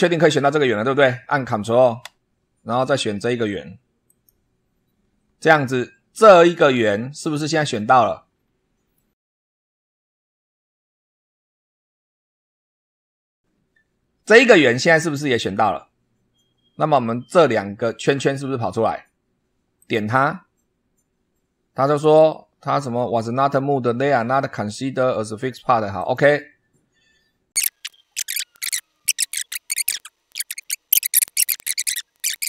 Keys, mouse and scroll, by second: 4.0 ctrl+click, 6.9-7.2 scroll up 2, 8.2-8.6 scroll down 2, 8.9-9.7 middle drag, 19.7 click, 25.9 click, 27.9 middle click, 28.0 scroll down 2, 28.1 shift+middle click, 28.3 click, 28.6 Delete, 28.7 click, 28.9 scroll up 2, 29.1 click, 29.2 middle click, 29.5 click, 29.8 click, 30.3 click, 30.5 click, 30.6 click, 30.7 middle click, 30.7 click, 31.0 click, 31.7 click, 31.8 click, 32.0 click.